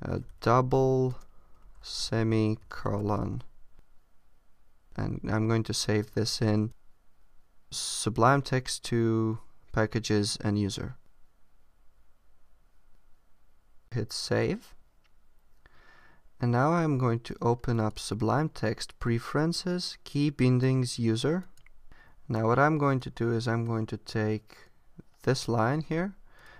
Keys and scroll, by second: 0.1 shift+d, 1.8 shift+s, 25.7 super+c.